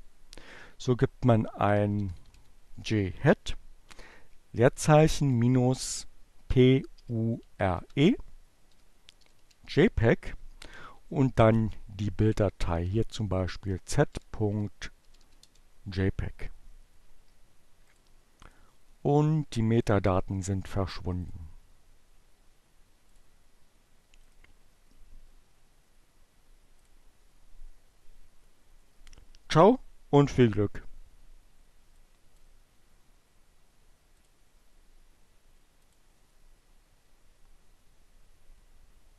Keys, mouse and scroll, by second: 3.9-4.8 typing, 6.1-7.4 typing, 9.0 space, 11.4-12.5 typing, 13.5 p, 14.1 g, 14.2 Return, 16.7 click, 18.6 click, 21.7 click, 22.8 right click, 25.6 click, 30.6 click, 34.6 click.